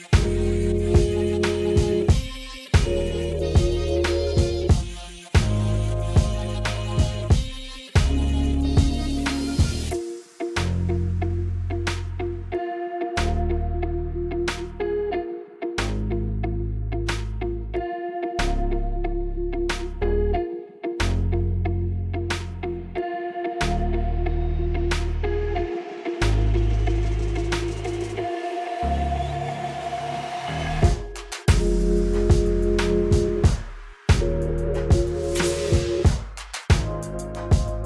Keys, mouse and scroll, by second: 6.8 click, 8.2 click, 9.9 shift+a, 19.9 click, 21.4 drag, 30.9 click, 32.0-34.0 drag, 37.1 click.